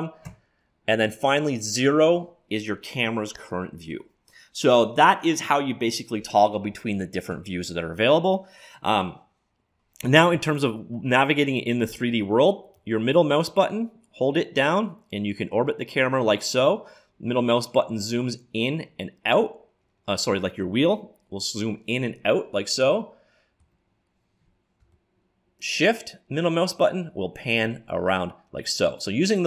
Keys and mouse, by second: 0.2 KP_0, 7.4 KP_1, 12.7-14.7 middle drag, 17.2-21.4 middle drag, 21.5-24.8 middle drag, 24.9-26.9 middle drag, 28.9-29.4 middle drag.